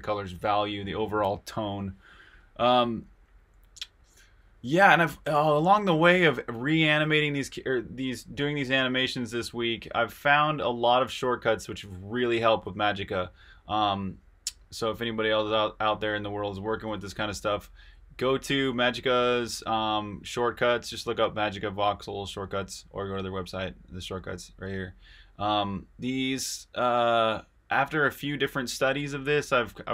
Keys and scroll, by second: 17.0 super+Tab.